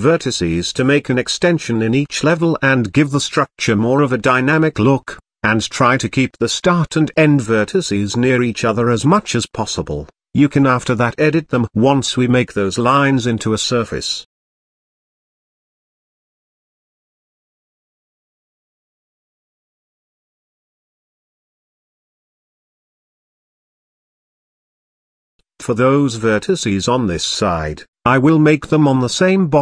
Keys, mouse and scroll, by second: 3.0 ctrl+click, 3.5 ctrl+click, 4.1 ctrl+click, 5.5 ctrl+click, 6.3 g, 10.5 click, 11.2-12.3 middle drag, 12.3 click, 13.5 alt+click, 14.0 KP_7, 14.9 g, 17.5 ctrl+click, 18.3 ctrl+click, 18.9 g, 22.4-22.7 scroll down 3, 22.7-24.5 middle drag, 24.9-26.1 scroll up 2, 26.1 click, 28.3 click, 28.6 s.